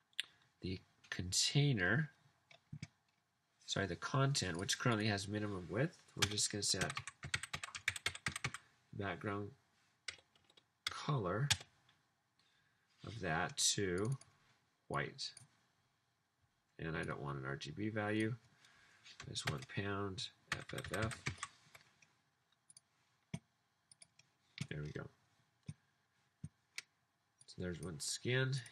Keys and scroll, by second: 6.3 Return, 6.5-8.9 typing, 10.3 Down, 10.4 Down, 10.9 Down, 11.4 Return, 19.5-21.5 typing.